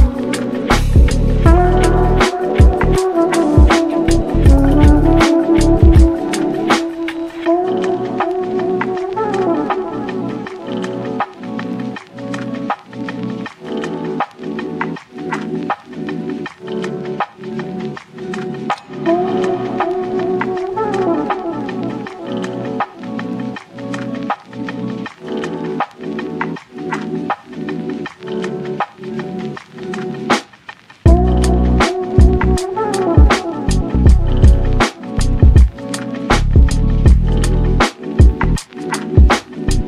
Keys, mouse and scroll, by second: 4.0-4.3 middle drag, 4.3-6.3 shift+right drag, 7.9-9.9 drag, 12.2-14.2 shift+right drag, 14.4 click, 15.1-15.5 scroll up 2, 15.5-16.4 middle drag, 16.4 click, 17.1 KP_3, 17.5 scroll down 1, 17.7 shift+middle drag, 18.0-18.4 scroll up 2, 18.4 s, 20.0 scroll down 1, 20.2-20.7 middle drag, 20.7 scroll up 1, 20.9-22.2 shift+middle drag, 22.2 r, 24.3 middle click, 25.1 KP_7, 25.9 g, 27.1-27.9 middle drag, 27.9-28.3 scroll up 4, 28.3-29.3 middle drag, 29.3-29.9 scroll down 1, 29.9 click, 30.3 scroll down 1, 30.5-32.4 shift+middle drag, 32.4 alt+d, 32.9 r, 34.6 KP_7, 35.3 g, 37.0 z, 37.3 click, 37.7 z, 38.4 g.